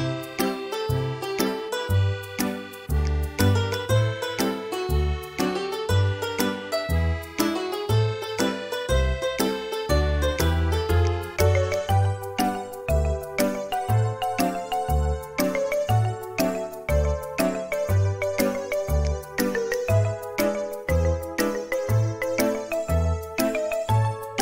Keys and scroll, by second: 5.3 e, 6.1 space, 10.5 typing, 16.5 Escape, 16.5 space, 22.4 space.